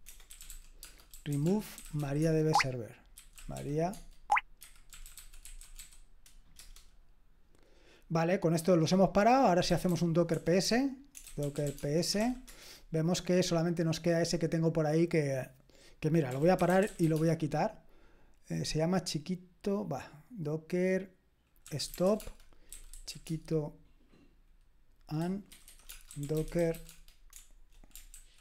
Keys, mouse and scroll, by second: 0.0-6.3 typing, 6.6 Return, 9.4-12.7 typing, 16.0-17.5 typing, 21.6-23.5 typing, 25.2-27.3 typing, 28.1 ctrl+w.